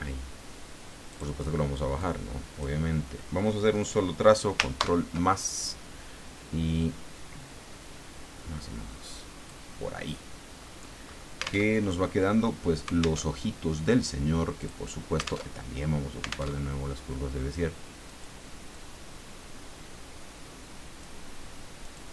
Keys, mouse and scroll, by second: 1.1 click, 2.0 click, 4.8 ctrl+KP_Add, 6.8-9.7 drag, 10.5-11.4 scroll up 4, 11.7 alt+Tab, 13.2 alt+Tab, 14.6 click, 15.5 alt+Tab, 16.5 alt+Tab, 18.1-21.2 drag, 21.8 click.